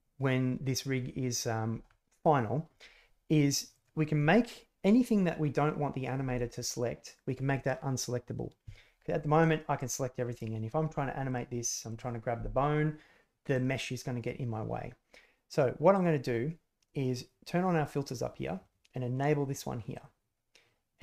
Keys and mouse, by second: 9.4 click, 9.7 click, 10.3 click, 11.2 click, 11.8 click, 13.5 click, 15.9 click, 17.1-20.3 drag.